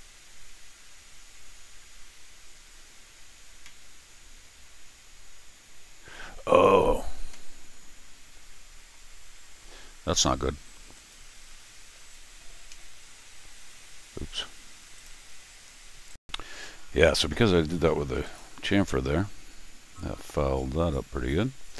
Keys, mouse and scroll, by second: 2.5 middle click, 3.0-7.4 right drag, 3.6-6.7 middle drag, 7.3-8.9 middle drag, 10.9 click, 14.9 click, 16.1 click, 16.2-21.7 right drag, 18.2 click.